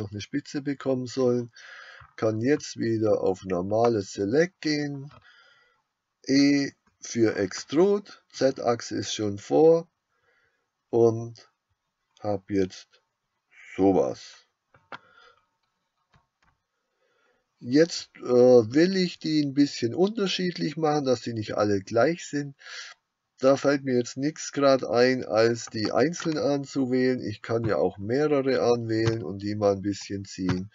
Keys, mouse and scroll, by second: 3.8 click, 6.4 e, 14.9 click, 25.7-28.0 drag.